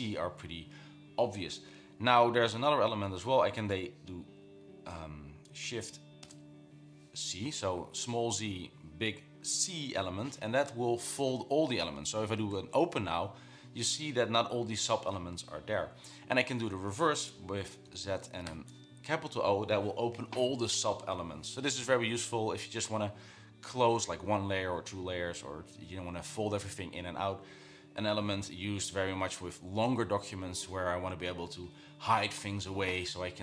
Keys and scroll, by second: 5.8 z, 6.4 shift+c, 12.2-13.2 typing, 18.1 z, 18.7 shift+o.